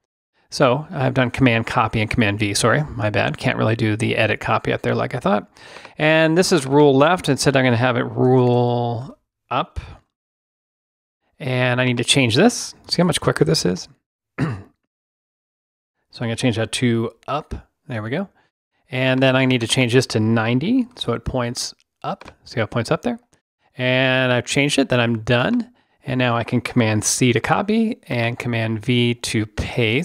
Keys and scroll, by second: 8.2 BackSpace, 9.8 shift+BackSpace, 12.8 BackSpace, 15.1 BackSpace, 17.1 Up.